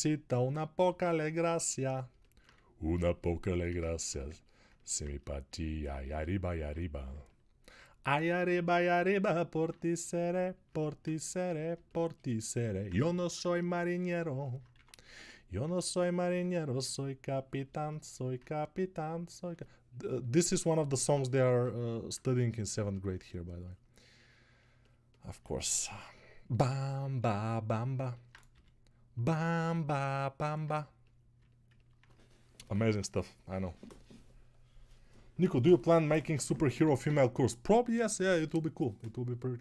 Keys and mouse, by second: 1.7-7.0 alt+shift+drag, 1.7-7.0 alt+shift+middle drag, 1.7-7.0 alt+shift+right drag, 3.8 ctrl+z, 11.7-21.2 alt+shift+drag, 11.7-21.2 alt+shift+right drag, 15.0-21.2 ctrl+middle drag.